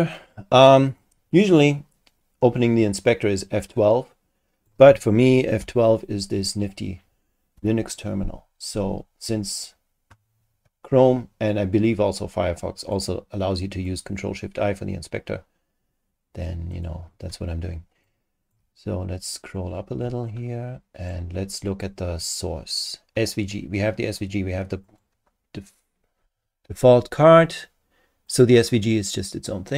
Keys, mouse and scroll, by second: 1.0-4.8 super+drag, 5.6 F12, 7.5 F12, 12.8 click, 13.9 click, 16.7 click, 18.1 super+click, 18.8-19.6 super+scroll down 5, 20.3 super+click, 24.8 click, 28.3 click.